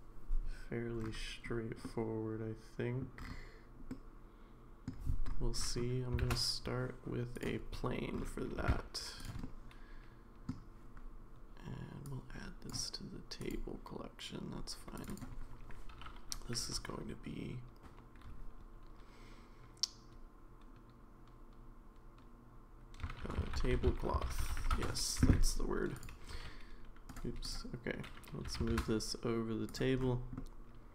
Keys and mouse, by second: 1.8-3.0 middle drag, 3.9-4.9 middle drag, 6.2 shift+a, 8.6 g, 9.4-10.5 middle drag, 12.1-12.7 drag, 13.4 click, 15.0 click, 15.1-25.2 drag, 26.3 g, 28.4 g, 30.4-30.9 middle drag.